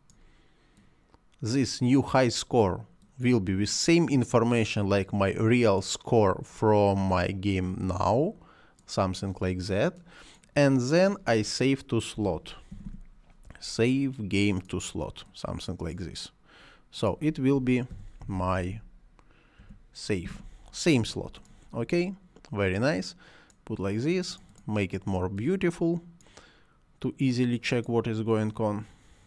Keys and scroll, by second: 11.8-13.2 typing, 17.5-20.2 typing.